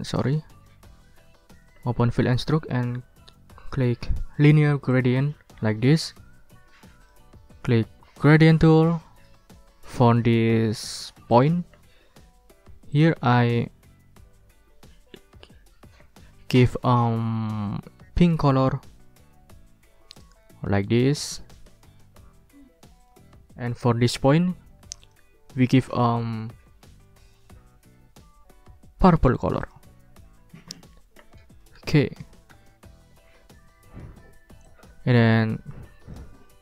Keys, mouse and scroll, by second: 0.1 click, 1.6 ctrl+shift+f, 4.9 click, 11.3 click, 12.9 click, 18.2 click, 20.1 click, 23.0 click, 25.0 click, 29.6 click, 31.8 alt+Tab, 32.5 alt+Tab, 34.7-36.3 drag.